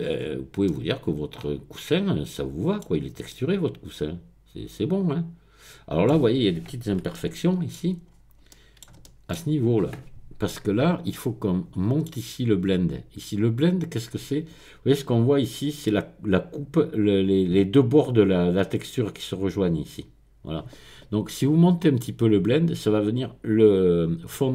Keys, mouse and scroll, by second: 0.2-0.7 scroll up 1, 2.9-3.3 scroll down 1, 8.1-8.9 scroll up 3, 9.0 shift+middle click, 11.1-12.4 middle drag.